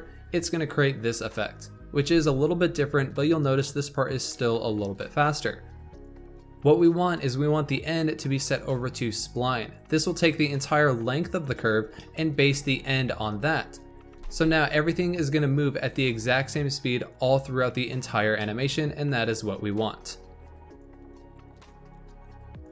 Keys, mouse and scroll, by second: 1.9 space, 7.8-8.4 drag, 11.2 scroll down 2, 11.9-13.9 shift+middle drag, 13.9 click, 14.0 space, 18.3-19.3 shift+middle drag, 19.3 scroll down 2.